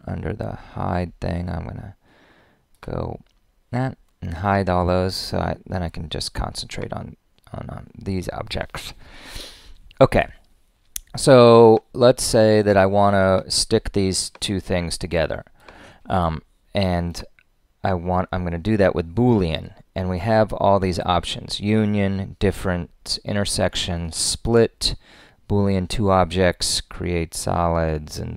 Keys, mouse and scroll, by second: 15.8 click.